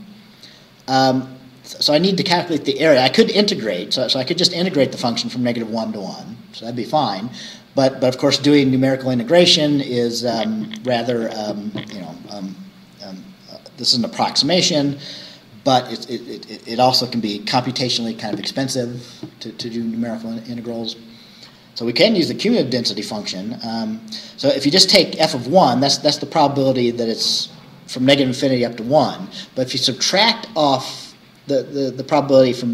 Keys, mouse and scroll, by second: 3.4-3.7 scroll down 2.